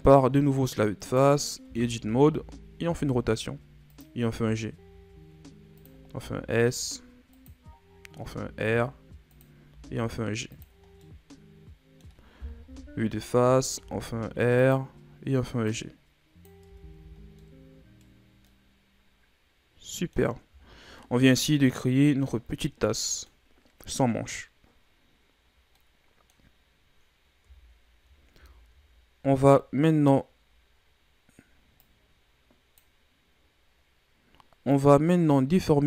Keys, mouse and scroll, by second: 1.0 right click, 1.6 Tab, 1.9 a, 2.2 a, 2.9 r, 4.2 g, 6.1 s, 8.1 r, 9.7 g, 10.8 scroll down 3, 11.0-12.6 middle drag, 12.6 KP_1, 13.7 r, 15.6 click, 16.6 Tab, 16.9 a, 17.2 scroll down 2, 17.4-20.6 middle drag, 20.6-20.9 shift+scroll down 5, 20.9-24.0 middle drag, 31.8-34.8 drag.